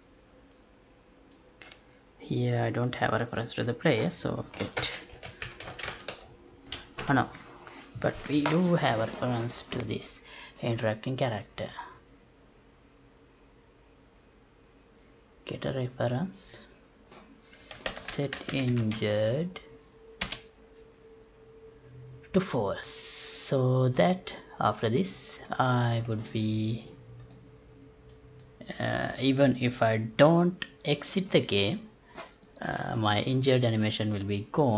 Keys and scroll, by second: 4.8 space, 5.7 space, 7.0 Escape, 18.0 space.